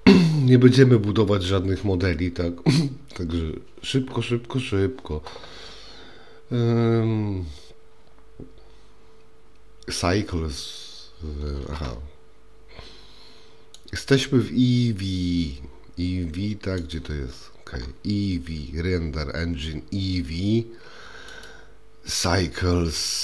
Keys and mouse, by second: 13.9 click, 16.8 click, 21.4-23.2 drag.